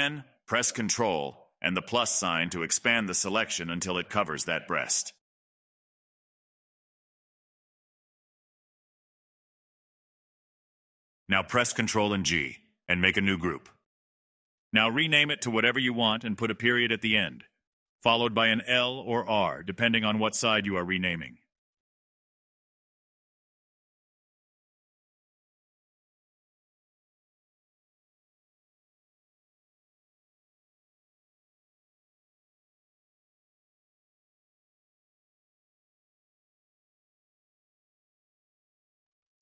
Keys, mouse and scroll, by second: 0.4 middle click, 0.6 scroll down 2, 0.9-3.7 middle drag, 3.7-4.7 ctrl+KP_Add, 7.4-8.4 middle drag, 8.4 ctrl+KP_Add, 9.1-11.4 middle drag, 11.4 ctrl+g, 13.5 click, 14.1 scroll down 10, 15.1 click, 15.3-20.8 drag, 20.8-22.0 middle drag, 22.0-22.9 scroll up 2, 22.9 click, 23.8 ctrl+KP_Add, 24.0 ctrl+KP_Add, 26.2 scroll down 1, 26.4 middle click, 27.1 ctrl+g, 28.3 click, 28.4-31.4 drag, 31.9 middle click, 32.4 click, 32.8 middle click, 33.6 click, 34.4-35.9 scroll up 2, 35.9 click, 36.3 click, 36.6 click, 36.9-38.2 middle drag, 38.2 click, 38.6 middle click.